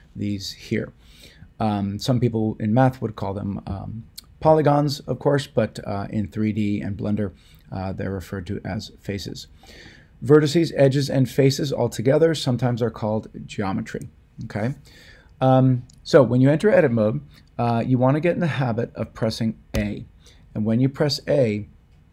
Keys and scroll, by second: 19.7 a.